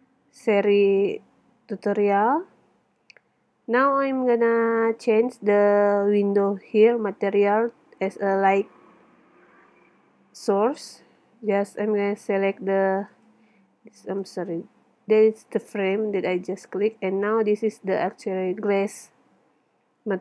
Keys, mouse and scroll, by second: 0.5 middle click, 2.6-3.7 middle drag, 5.8 middle click, 6.6 middle click, 6.9 middle click, 7.7 middle click, 9.7 middle click, 11.7 middle click, 12.8 middle click, 14.4 middle click, 16.2 middle click, 17.8 middle click, 18.4 middle click, 20.0 middle click.